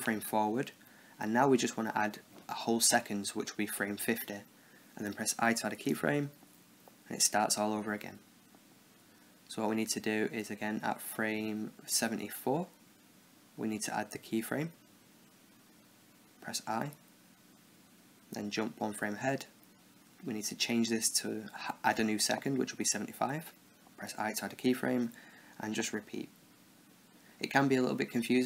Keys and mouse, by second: 2.4-5.5 drag, 5.5 i, 7.8-9.3 drag, 13.2 Right, 13.9 Right, 14.4 Left, 17.9 |, 19.2 Right, 20.5-22.3 drag, 23.7 i, 25.4-27.1 drag.